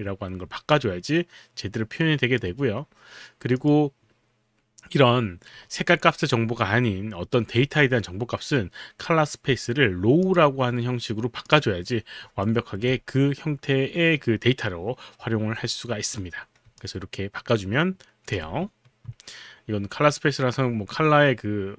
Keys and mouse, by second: 0.8 alt+click, 3.6 click, 10.3 click, 11.5 click, 12.5 alt+right click.